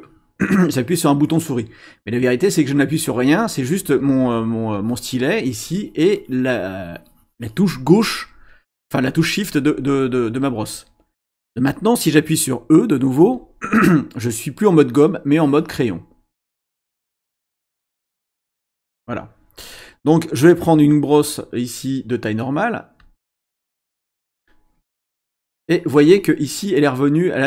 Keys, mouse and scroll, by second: 4.7-7.8 drag, 13.2 e, 15.1-16.5 scroll up 2, 17.7 ctrl+z, 18.5 ctrl+z, 23.0 click, 25.4 click.